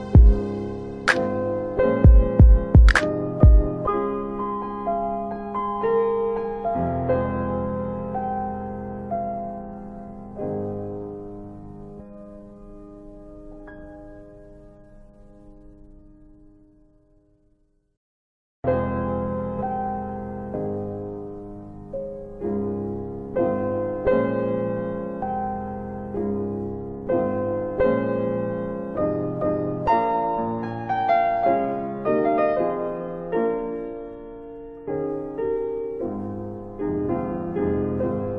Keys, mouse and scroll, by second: 13.5 click, 15.9 click, 17.4 ctrl+z, 22.6 click, 25.8 click, 26.8 alt+click, 28.2 alt+click, 29.1 alt+right click, 33.5 alt+right click, 33.7 alt+click, 34.3 alt+click, 35.0 alt+right click, 36.0 alt+right click, 36.2 alt+click.